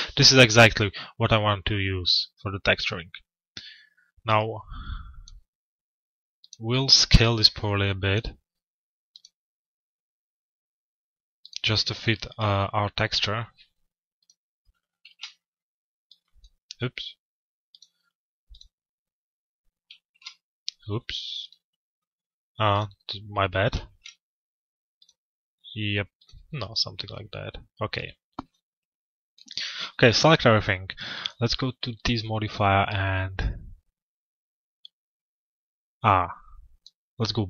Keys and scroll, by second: 14.6 ctrl+a, 23.4 ctrl+a.